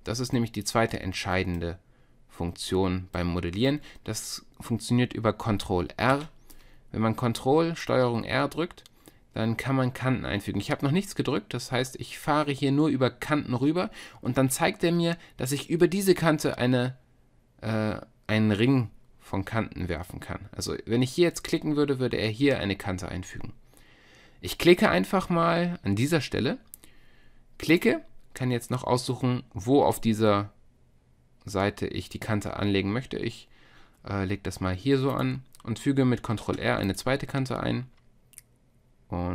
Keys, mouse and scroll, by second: 2.4 middle click, 3.2-6.2 drag, 6.2 ctrl+r, 36.5 ctrl+r.